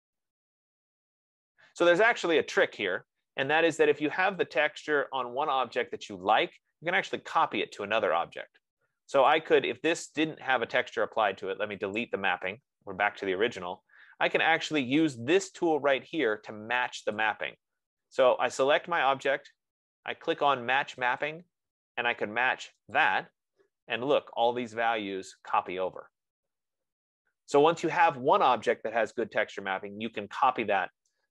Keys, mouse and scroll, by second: 4.8 click, 9.7 click, 10.3 click, 12.5 click, 18.7 F15, 19.1 click, 21.8 click, 23.3 click.